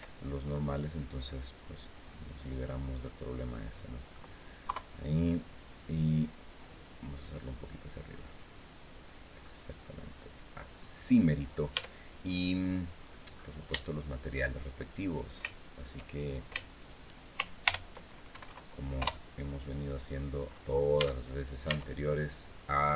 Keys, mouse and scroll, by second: 2.9 right click, 3.2 middle click, 4.4 KP_3, 7.1-10.8 right drag, 11.5 Tab, 12.1 middle click, 13.5 shift+middle click, 14.8 right click, 15.9 shift+right click, 16.5 shift+right click, 17.4 ctrl+shift+l, 18.1 ctrl+Down, 18.7 ctrl+Return, 19.8-20.2 scroll down 2, 20.4 scroll down 2, 20.7 Tab, 21.4 Tab, 21.8-22.2 scroll down 1, 22.3 click.